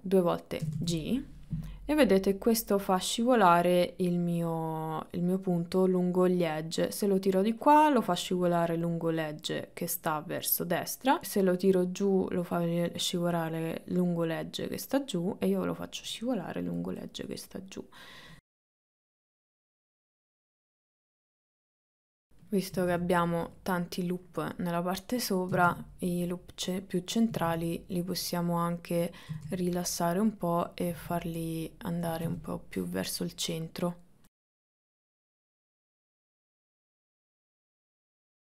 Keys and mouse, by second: 0.7 g, 17.2-18.2 middle drag, 18.6-22.0 typing, 18.9 middle click, 21.0 click, 25.6 g, 27.2 click, 27.3 g, 29.1 click, 30.8 click, 30.9 g, 32.1 g, 35.9 shift+middle click, 36.4 KP_1, 36.6 KP_3, 36.9 shift+middle click, 37.2 g, 38.0 g.